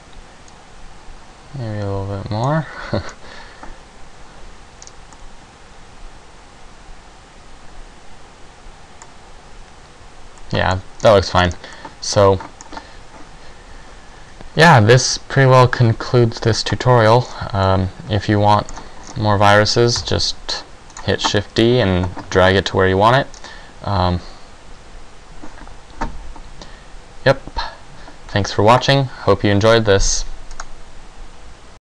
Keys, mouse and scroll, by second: 3.9 scroll down 1, 6.5 middle click, 6.5-6.9 scroll down 2, 13.3 middle click, 13.3 scroll down 6, 17.3-18.0 scroll down 3, 17.8 middle click, 18.9-19.5 scroll down 5, 20.1 KP_0, 21.1 right click, 23.5-25.1 scroll down 2.